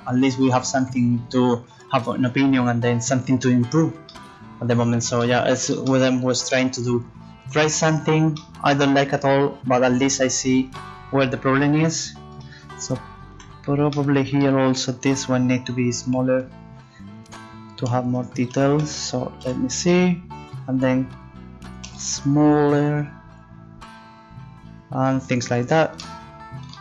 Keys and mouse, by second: 9.2-10.7 middle drag, 13.3 z, 13.8-16.5 middle drag, 17.2-19.4 drag, 18.1-19.4 right drag, 19.4 middle click, 19.4 z, 21.8 s.